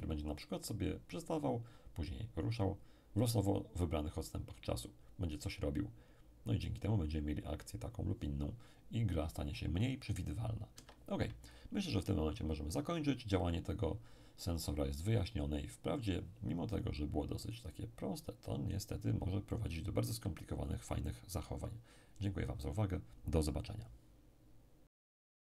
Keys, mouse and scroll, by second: 10.7 Escape.